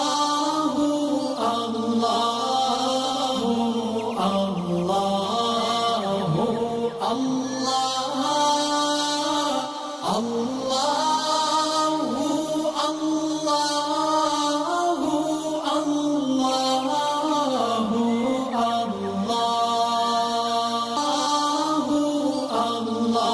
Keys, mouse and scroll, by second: 0.8 scroll down 2, 1.3 click, 1.9 alt+scroll down 1, 2.4 alt+scroll down 1, 2.8 space, 2.8-3.6 click, 3.6 alt+scroll down 1, 4.4 alt+scroll up 1, 4.9 space, 5.0 click, 6.0 alt+scroll down 1, 6.3 click, 8.2 click, 10.6 alt+click, 10.8 alt+scroll up 1, 10.9 alt+shift+click, 11.1 alt+shift+scroll down 1, 11.1 click, 11.4 alt+click, 11.9 alt+scroll up 1, 11.9 alt+shift+click, 12.1-12.7 click, 12.2 alt+click, 12.6 alt+click, 12.8 click, 12.9 click, 13.0 alt+scroll up 1, 13.1 alt+click, 13.4 click, 13.5 alt+scroll down 1, 13.6 alt+click, 13.7 click, 13.8 alt+click, 14.1 click, 14.1-14.7 alt+scroll up 4, 14.3 alt+click, 14.5 alt+shift+click, 14.7 alt+click, 15.2 alt+click, 15.4 alt+scroll up 2, 15.5 alt+shift+click, 15.6 click, 15.7 alt+click, 15.8 alt+click, 16.1 alt+shift+click, 16.4 click, 16.5 alt+scroll down 1, 16.5 click, 17.1 space, 17.2 alt+scroll up 1, 17.2 click, 17.7 space, 18.0 click, 18.3 ctrl+shift+[, 18.4 click, 18.6 ctrl+shift+[, 18.8 click, 18.8 space, 18.9 click, 19.1 alt+scroll up 1, 19.3 click, 19.9 alt+shift+click, 20.2 alt+scroll up 1, 20.2 click, 20.6 click, 20.7 alt+scroll up 1, 20.8 click, 20.9-22.1 alt+drag, 22.8 alt+scroll down 1, 23.0 space, 23.1 click.